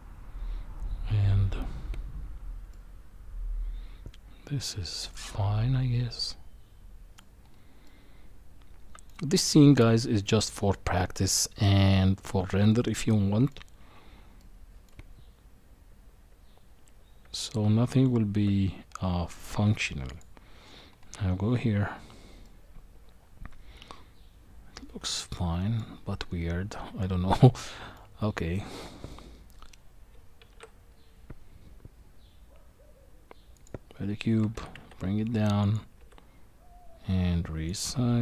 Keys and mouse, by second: 2.7-7.2 middle drag, 7.8-9.1 middle drag, 12.7 middle click, 14.4 middle click, 17.2 Tab, 19.7 q, 22.4-25.8 middle drag, 27.4 middle click, 28.7 middle click, 30.5 shift+a, 34.5 g, 36.5 s.